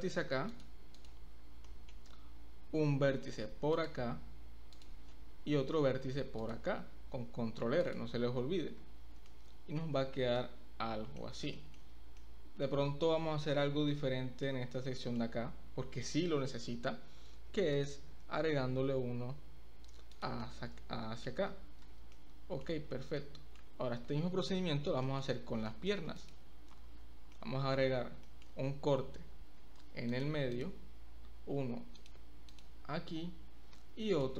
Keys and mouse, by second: 1.7 middle click, 3.2 ctrl+r, 4.8 click, 5.8 ctrl+r, 7.8 click, 8.8 Tab, 9.3-9.8 middle drag, 10.4-11.0 middle drag, 11.0 drag, 11.5 shift+click, 12.2 middle click, 12.3-12.6 drag, 13.4 Tab, 13.9 middle click, 14.2 click, 14.3 middle click, 15.0 shift+middle click, 16.6 ctrl+r, 20.5 click, 20.6 middle click, 21.9 Tab, 22.1-22.6 middle drag, 23.2-23.5 middle drag, 25.1 middle click, 25.6 middle drag, 25.8 click, 25.8 right click, 26.2 click, 27.0 Tab, 27.3 click, 27.3 right click, 28.2 shift+middle click, 29.6 ctrl+r, 30.5 click, 31.6 ctrl+r, 32.5 click, 33.7 ctrl+r.